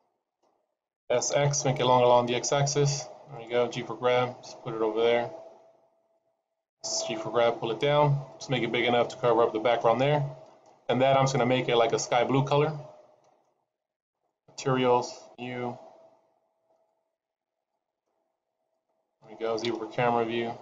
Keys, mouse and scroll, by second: 1.0 s, 3.6 g, 6.9 g, 11.3 middle click, 14.0 click, 15.1 click, 16.7 click, 19.6 KP_0.